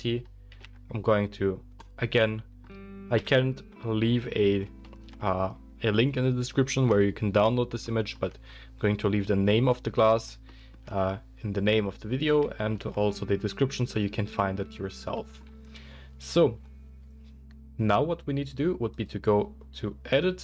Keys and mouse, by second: 0.5 g, 1.9-19.1 middle drag, 3.1 KP_1, 19.1-20.4 drag.